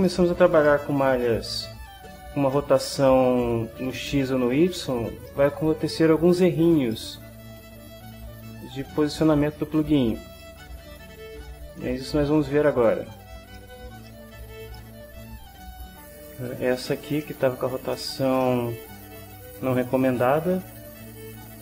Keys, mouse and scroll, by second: 0.1-0.5 ctrl+drag, 0.7 ctrl+shift+click, 0.8 ctrl+shift+middle click, 1.2 ctrl+shift+middle click, 1.8 click, 2.6 middle click, 5.2-6.4 middle drag, 6.9 middle click, 7.7 click, 8.2 middle click, 10.4 middle click, 12.8 click, 13.5-14.5 shift+drag, 14.5 ctrl+shift+middle click, 14.9 ctrl+middle click, 15.9 shift+click, 16.3 shift+middle click, 16.4 shift+click, 17.7 shift+middle click, 18.7 middle click, 21.5 click.